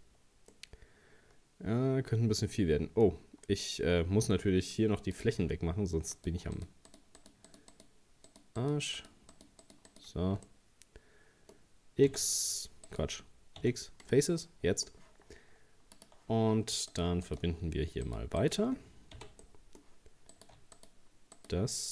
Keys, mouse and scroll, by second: 0.5 scroll up 1, 0.5-3.5 middle drag, 5.1-6.1 drag, 6.1 right click, 6.6 shift+right click, 6.9 shift+right click, 7.2 shift+right click, 7.5 shift+right click, 7.7 shift+right click, 8.3 shift+right click, 8.6 shift+right click, 9.0 shift+right click, 9.3 shift+right click, 9.6 shift+right click, 9.9 shift+right click, 10.5-12.1 middle drag, 12.1 c, 13.6 x, 14.4-16.0 middle drag, 16.0 click, 16.9 right click, 17.3 shift+right click, 18.1 shift+right click, 18.4 shift+right click, 19.2 f, 19.4 middle click, 20.3 right click, 20.8 shift+right click, 21.4 shift+right click.